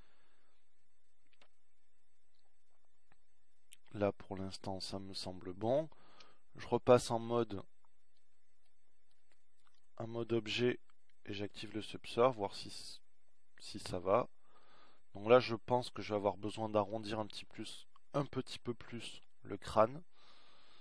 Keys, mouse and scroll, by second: 10.6 Tab.